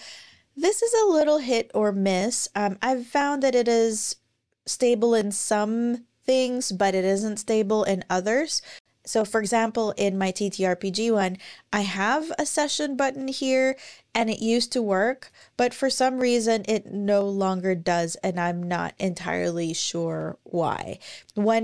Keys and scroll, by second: 16.3-18.2 scroll down 1, 18.2 scroll up 1.